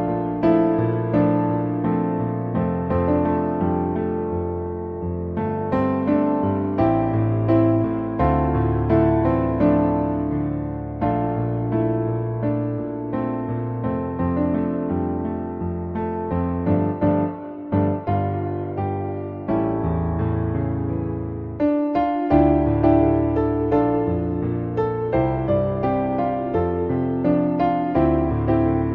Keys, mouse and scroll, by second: 0.0 g, 0.7 g, 1.4 click, 1.6 g, 2.9 g, 4.0 middle click, 4.3 `, 5.2 click, 5.5 g, 6.8 g, 7.4 click, 8.5 g, 9.1 click, 9.8 g, 11.5 middle click, 11.9 Tab, 12.0 middle click, 13.2 right click, 14.4 middle click, 16.1 click, 16.7-17.6 drag, 19.0-19.8 drag, 20.2-20.8 middle drag, 21.4 shift+middle click, 22.6 drag, 23.2 Tab, 24.1 middle click, 24.6 e, 25.6 e, 26.5 middle click, 27.9 e, 28.6 shift+middle click.